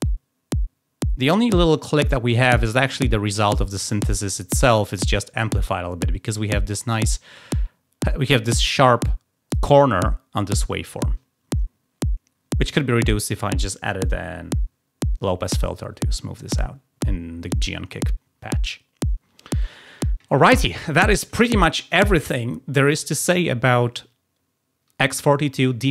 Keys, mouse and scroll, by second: 21.8 click.